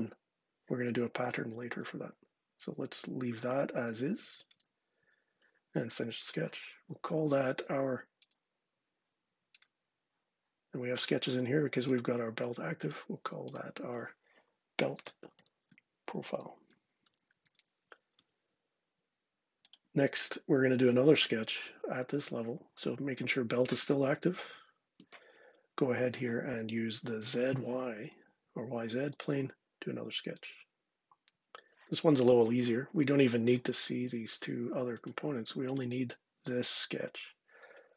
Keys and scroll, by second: 14.3-17.7 typing, 17.9 Return.